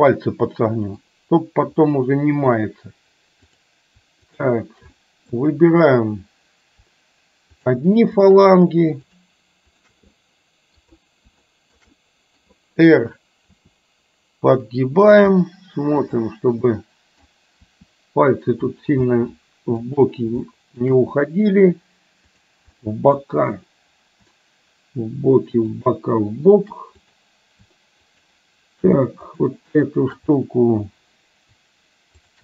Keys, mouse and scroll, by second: 2.0-2.6 middle drag, 3.5 click, 4.5 shift+click, 5.0-5.3 middle drag, 9.2 shift+drag, 9.8 shift+click, 10.2-11.0 middle drag, 11.5-11.8 shift+middle drag, 12.0-12.5 middle drag, 13.6 r, 15.3-16.3 middle drag, 16.7 middle click, 17.8 r, 19.2-19.8 middle drag, 20.6 shift+middle drag, 22.8-23.2 middle drag, 25.8 shift+click, 29.3 shift+click.